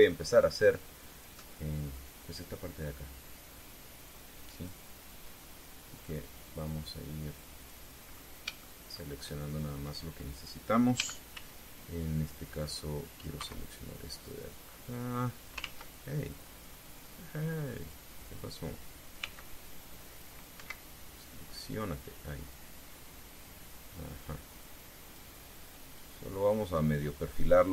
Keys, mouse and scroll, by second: 0.3 KP_3, 2.5-5.6 drag, 6.7-8.6 drag, 8.8 scroll up 2, 9.3 shift+middle click, 11.7 a, 12.1 c, 13.1 click, 14.1 Escape, 15.2-16.3 drag, 16.3 ctrl+z, 18.5 click, 19.9 c, 20.3 click, 21.3 Escape, 22.0-23.5 drag, 24.0-26.1 drag, 26.7 click.